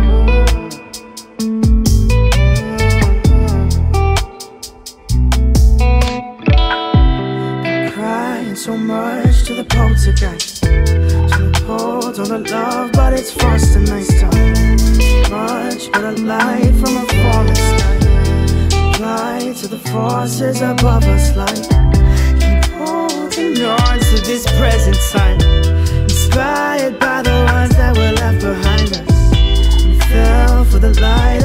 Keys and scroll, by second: 29.0 ctrl+space.